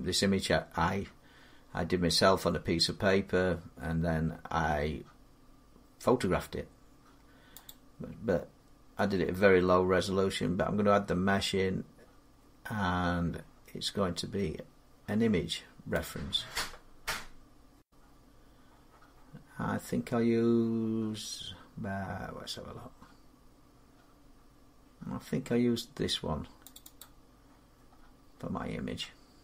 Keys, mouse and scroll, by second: 7.5-12.5 drag, 15.8-17.6 drag, 26.5 click, 26.7 click, 27.9 middle click.